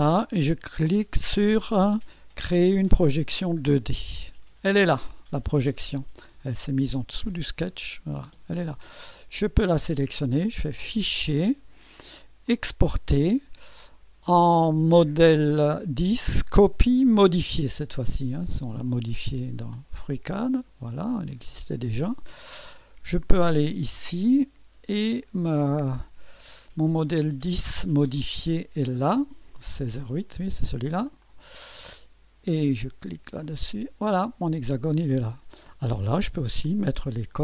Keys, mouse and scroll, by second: 3.7 click, 7.2 click, 7.7 space, 9.1 click, 10.8 click, 12.5 click, 18.0 click, 20.1 click, 21.3 click, 23.7 click, 31.0 click, 33.4 click.